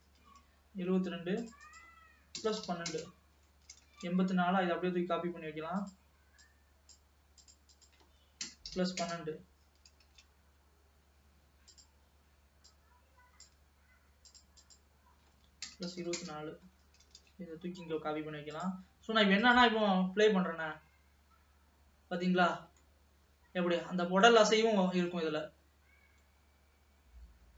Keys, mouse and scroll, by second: 1.5-4.0 drag, 4.0 shift+d, 6.4-10.1 drag, 10.1 shift+d, 12.7-17.4 drag, 17.4 shift+d, 19.5 click, 20.0 space, 21.2-22.9 scroll down 1, 22.9-27.5 middle drag.